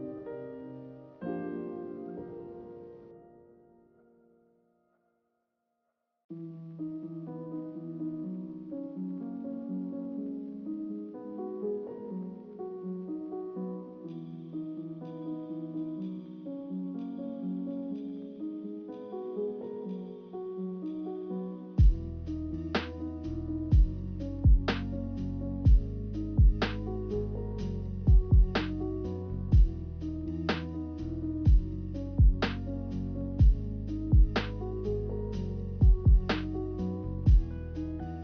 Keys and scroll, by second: 2.5 a, 14.8 8, 16.6 3, 18.3 2, 21.3-22.1 typing, 28.3-29.7 typing, 31.8 a, 37.5 ctrl+z.